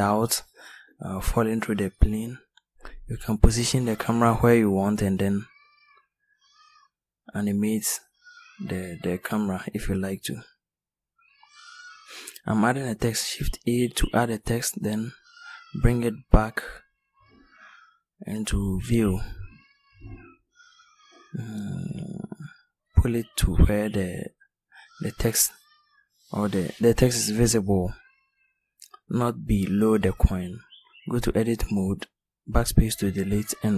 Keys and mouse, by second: 7.1 shift+s, 9.2 shift+a, 24.5 ctrl+z, 26.5 r, 29.1 Tab, 31.1-33.3 typing.